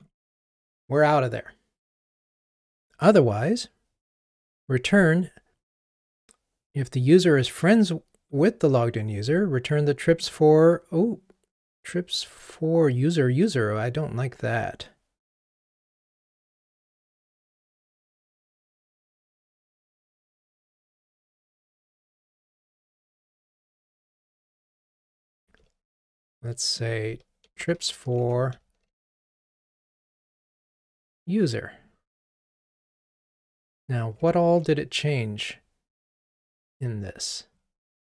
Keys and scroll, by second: 25.1 super+F6, 27.5 super+a, 27.8 super+x, 28.8 super+v, 36.5 super+k.